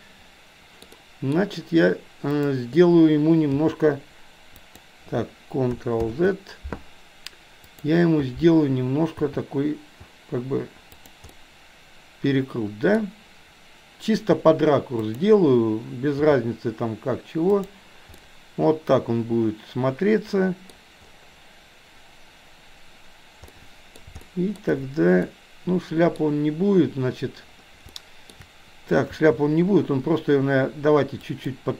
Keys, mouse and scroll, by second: 0.9 middle click, 2.3 click, 3.6 g, 6.1 ctrl+z, 7.7 click, 9.1 g, 11.4-12.9 middle drag, 12.9-14.3 scroll down 1, 14.3 r, 16.2 g, 18.2-20.7 middle drag, 23.6-24.1 middle drag, 24.3-26.8 shift+middle drag, 24.6-25.2 scroll down 1, 25.2-25.8 scroll up 1, 26.2-26.8 scroll down 1, 27.9-28.4 shift+middle drag, 27.9-28.4 scroll up 1, 29.2 g.